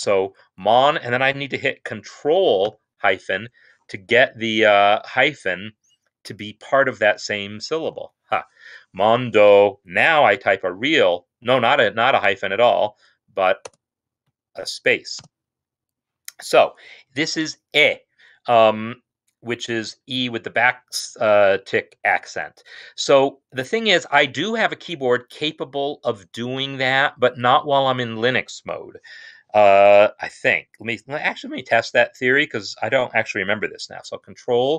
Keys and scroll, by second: 0.1-0.7 typing, 2.6 ctrl+-, 7.9 typing, 10.5 typing, 13.5 shift+space, 15.0 space, 33.9 ctrl+space.